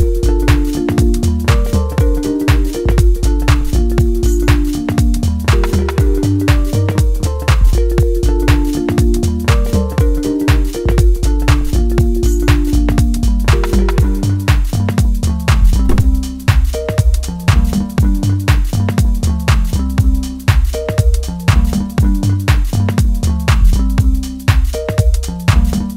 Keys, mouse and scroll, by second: 0.5 click, 1.0-1.4 scroll down 1, 1.4-3.5 middle drag, 3.5-5.9 drag, 5.9 scroll down 1, 6.1-7.6 middle drag, 7.6-10.6 drag, 10.6-13.0 middle drag, 13.0 scroll up 1, 13.2 middle click, 14.5 click, 15.5-17.2 middle drag, 17.2 click, 20.8-22.1 middle drag, 22.1-25.7 drag.